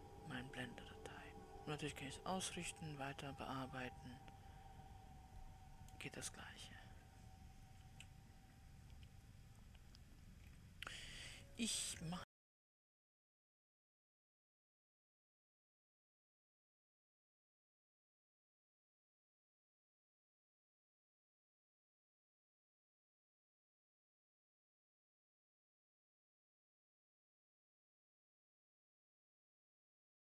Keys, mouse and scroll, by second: 8.3 KP_7, 11.0-12.6 scroll down 4, 12.6 ctrl+a, 14.2 click, 14.9-18.7 scroll down 6, 19.2-22.0 drag, 25.5 click, 26.6-30.2 drag.